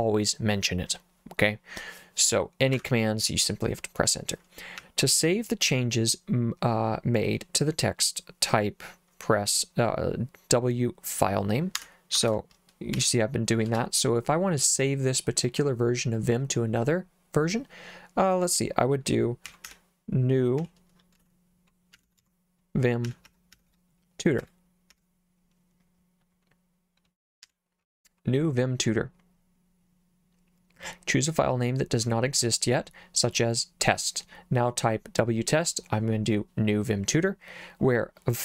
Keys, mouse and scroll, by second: 2.7 Escape, 4.8 j, 11.8 Escape, 12.3 shift+;, 13.0 w, 13.7 space, 19.2-24.9 typing, 27.4 r.